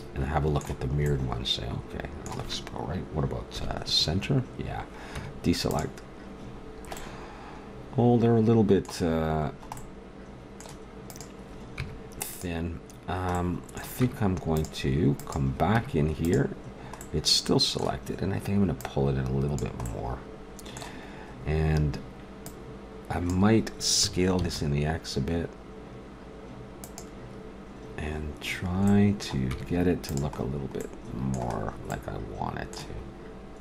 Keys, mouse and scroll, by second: 1.9 middle click, 3.6 KP_1, 5.2 Tab, 9.9 middle click, 11.1 right click, 11.7 Tab, 12.8 middle click, 14.0 Tab, 15.2-16.7 right drag, 15.7 Tab, 18.8 right click, 19.2 right click, 20.0 middle click, 22.4-24.2 drag, 23.9 s, 28.6 middle click, 29.5 Tab, 32.8 shift+s.